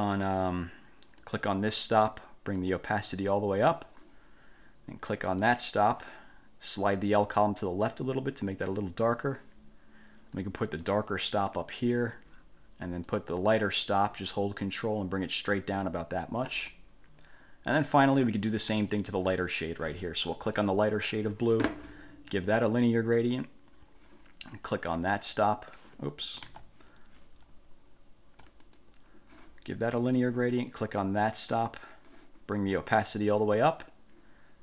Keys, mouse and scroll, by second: 1.4 click, 2.8 click, 5.6 click, 7.4-9.5 drag, 10.6-12.5 drag, 13.2-16.8 drag, 20.6 click, 23.3 click, 25.3 click, 26.6 ctrl+z, 28.8 ctrl+click, 30.2 click, 31.7 click, 33.2 click.